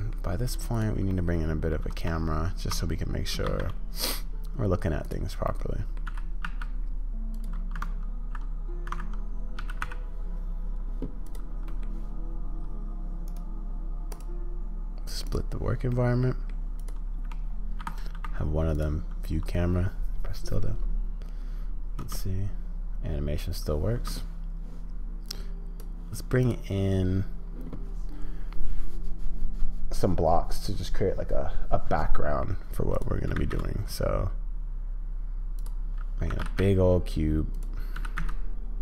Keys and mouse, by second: 0.7-1.7 drag, 5.4 click, 6.1 g, 8.9 g, 11.7 click, 15.9 click, 18.1 `, 22.0 space, 36.3 g, 37.9 g.